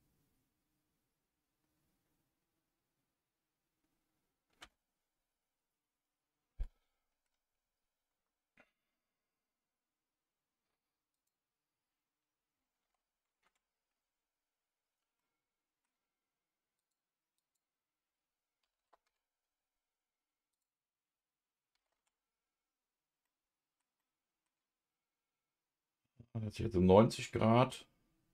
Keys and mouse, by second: 11.3-16.8 drag, 20.6-28.3 drag.